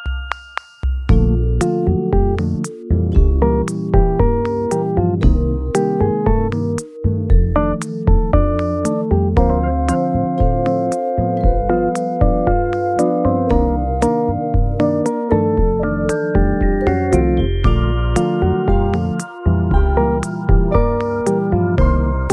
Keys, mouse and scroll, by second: 3.5 r, 4.1 z, 7.1 r, 7.3 y, 17.5 KP_3, 19.8 Return, 19.9 KP_2.